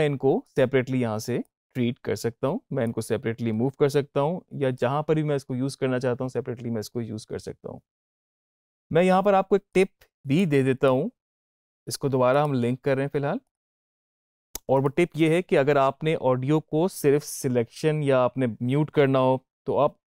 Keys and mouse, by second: 0.3-7.1 drag, 8.1-12.2 drag, 12.2 right click, 13.3 click.